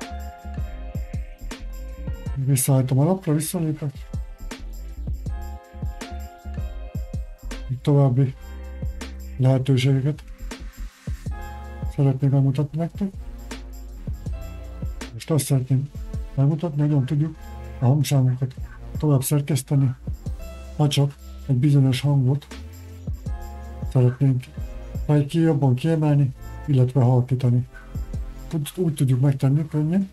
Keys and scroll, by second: 4.5-5.5 typing, 7.4-12.5 typing.